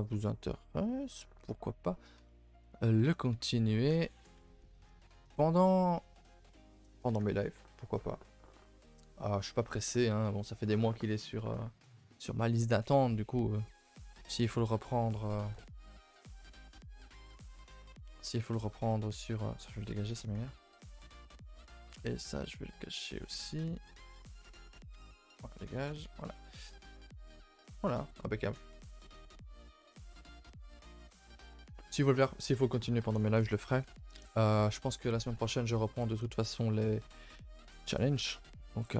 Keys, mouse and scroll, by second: 1.9 scroll up 1, 5.8 middle click, 5.8-6.3 scroll down 2, 6.5-16.1 shift+middle drag, 16.1 KP_0, 16.8 KP_0, 18.2-20.2 middle drag, 20.2 KP_0, 25.1 x.